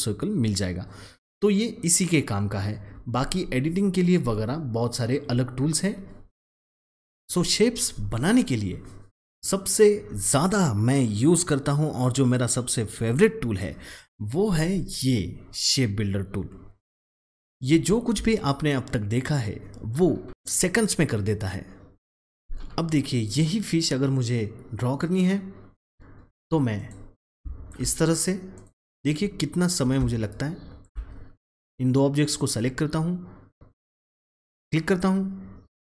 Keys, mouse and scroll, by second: 5.7 click, 17.6 alt+Num_Lock, 17.7-18.1 alt+scroll down 1, 25.7 alt+Num_Lock, 25.7 alt+scroll down 1, 25.9-26.7 alt+scroll up 1, 26.7-31.6 drag, 31.6-33.7 drag, 34.6 click.